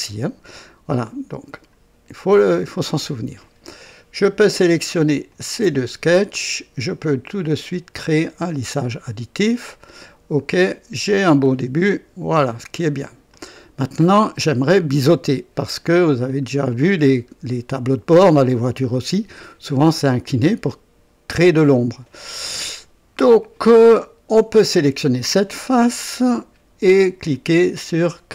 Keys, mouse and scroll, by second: 1.4 click, 2.3-3.8 drag, 5.3 ctrl+click, 8.2 click, 9.8 click, 10.5-11.3 drag, 11.4-12.3 drag, 12.4 click, 13.3 click, 14.2 right click, 16.2 click, 17.0-17.3 scroll up 2, 17.5 right click, 22.6-23.4 drag, 25.0 click.